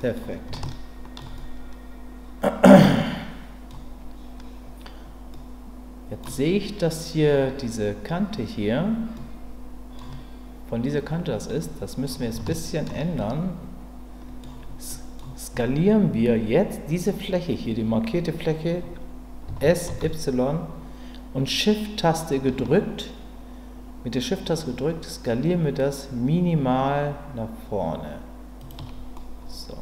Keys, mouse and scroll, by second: 0.0 middle click, 0.6 shift+middle click, 1.4-3.7 middle drag, 5.3 middle click, 9.2 middle click, 11.7 middle click, 12.4 shift+middle click, 13.1-14.4 middle drag, 14.9 middle click, 19.5 s, 19.9 y, 28.6 shift+click, 29.1-29.8 middle drag.